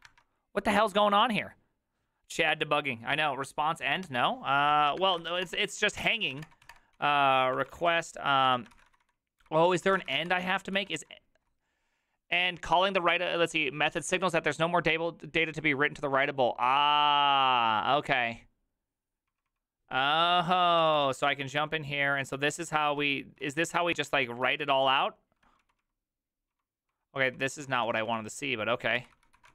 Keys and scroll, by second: 4.7 alt+{, 4.7 ctrl+a, 5.1-11.0 typing, 21.3 ctrl+d, 21.3 typing, 21.4 ctrl+d, 22.2 ctrl+d, 24.3 ctrl+d, 24.5 ctrl+u, 24.7 ctrl+u, 25.7-29.5 typing.